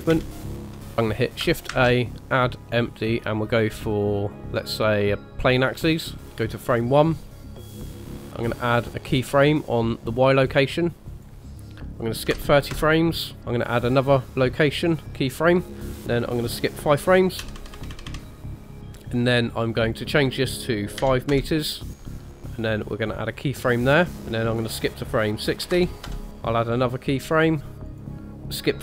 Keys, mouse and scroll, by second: 0.5 middle click, 0.5 space, 1.7 shift+a, 6.8 click, 7.7 click, 9.6 click, 10.4 scroll up 1, 11.1 click, 15.2 click, 17.5 Right, 17.6 Right, 17.8 Right, 17.9 Right, 18.1 Right, 19.9 click, 23.2 click, 24.4 click, 27.3 click, 27.9 click.